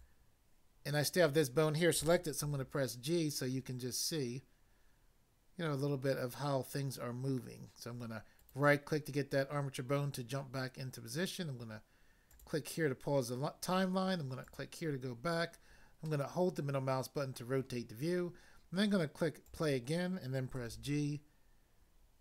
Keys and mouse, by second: 2.4 g, 8.4 right click, 12.3 click, 14.4 click, 16.0 middle click, 19.4 click, 20.6 g.